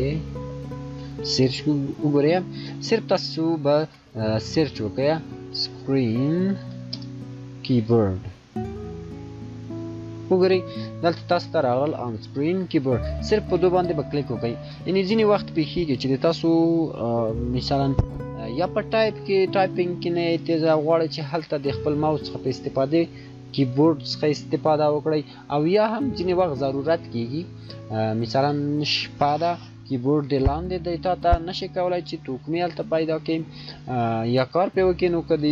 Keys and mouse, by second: 0.4 click, 3.6-6.8 typing, 8.8 typing, 12.5 click.